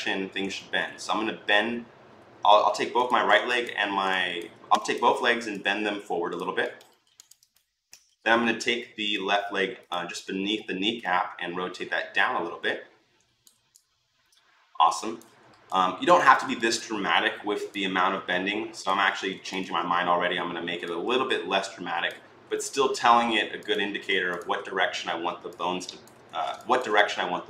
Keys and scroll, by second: 26.1 ctrl+z.